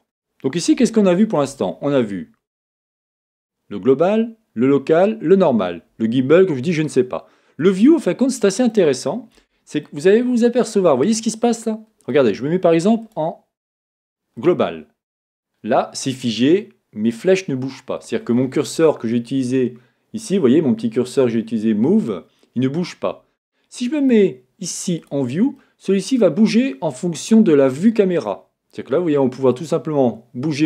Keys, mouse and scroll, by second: 0.0-2.6 middle drag, 0.0-0.9 scroll down 2, 2.6-6.9 drag, 8.3 middle click, 9.9 middle click, 10.3-13.0 middle drag, 13.0-15.3 drag, 15.3-17.8 middle drag, 18.1-22.2 middle drag, 18.1-19.2 scroll up 2, 19.2-22.2 scroll up 1, 24.0-25.6 drag, 25.6-29.6 middle drag, 29.6-30.6 drag.